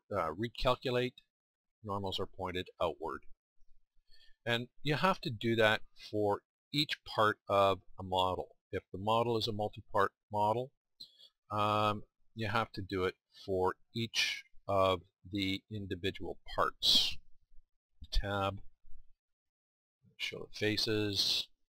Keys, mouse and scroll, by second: 2.9-6.1 middle drag, 17.2 click, 18.0 Tab, 21.6-21.7 drag.